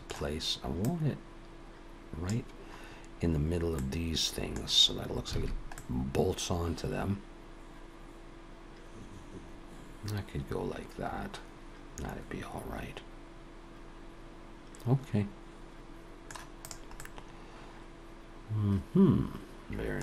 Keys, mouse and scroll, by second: 0.8 click, 3.3-3.8 scroll up 2, 3.8 middle click, 5.3 alt+a, 5.8 middle click, 16.6 click, 17.0 middle click.